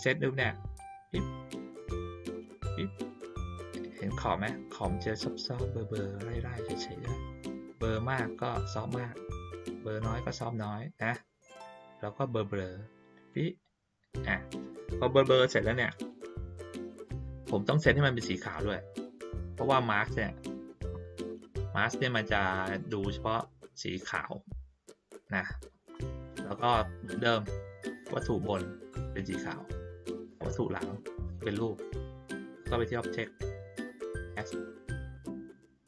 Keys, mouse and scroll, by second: 2.6 click, 7.0 click, 7.9-13.3 drag, 19.3 click, 25.6 ctrl+middle click, 25.6-26.1 ctrl+scroll down 1, 27.4 click, 28.0 click, 30.3 shift+click, 32.7 click.